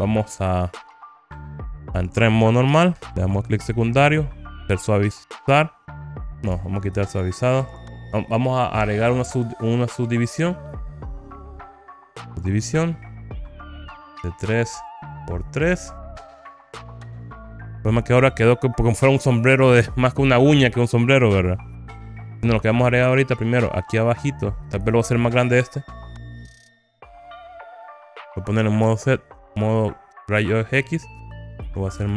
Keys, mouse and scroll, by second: 1.0 right click, 2.0 click, 2.8 Tab, 3.4 right click, 3.7 click, 6.6 Tab, 7.2 right click, 11.2-12.6 drag, 15.3 click, 16.2 click, 16.9 click, 17.5 middle click, 19.6-20.6 scroll up 3, 21.3 scroll down 1, 23.0-25.2 middle drag, 26.4-27.8 drag, 28.9 alt+z, 29.6 click, 30.0-32.1 drag, 32.0 s.